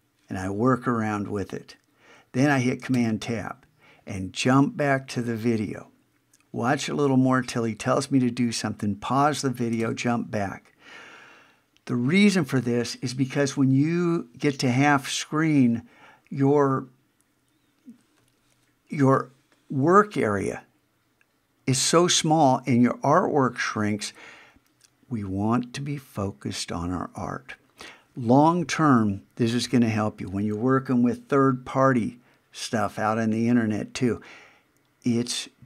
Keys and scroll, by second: 2.9 super+Tab, 9.8 super+Tab.